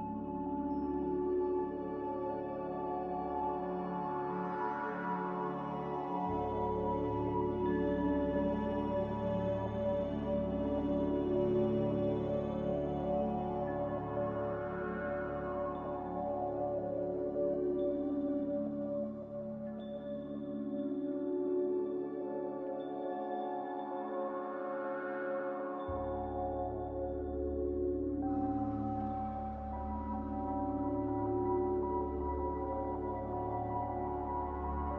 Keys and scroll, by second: 4.7 ctrl+z, 8.9 ctrl+z, 9.4-11.9 typing, 14.2-14.9 typing, 27.8 s, 30.8 q, 32.1 a.